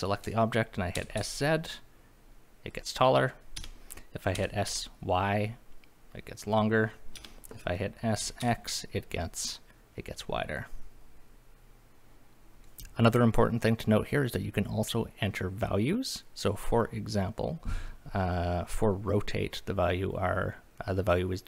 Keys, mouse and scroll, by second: 0.9 s, 1.2 z, 3.6 Escape, 4.3 s, 4.7 y, 7.1 Escape, 8.2 s, 8.4 x, 12.6 click.